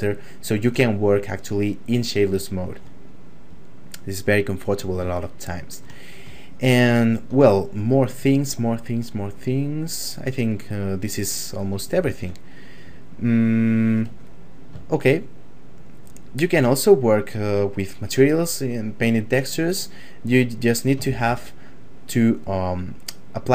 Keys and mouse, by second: 0.1 shift+middle click, 2.5 shift+middle click, 3.5 click, 5.4 shift+middle click, 6.0 middle click, 6.5 shift+middle click, 8.4 middle click, 11.9 shift+space, 12.5 middle click, 13.0 ctrl+middle click, 14.1 middle click, 14.9 shift+middle click, 19.8 click, 21.1 shift+space.